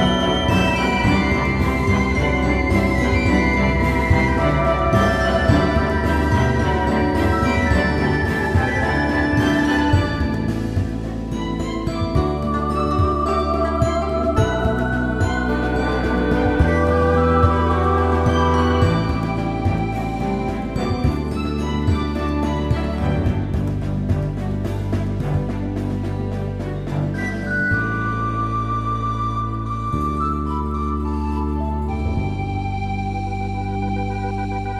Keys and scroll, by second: 0.1 space, 2.3 space, 4.3 space, 6.1 space, 8.7 space, 10.3 x, 11.9 space, 12.4 super+0, 18.0 super+d, 34.1 super+t.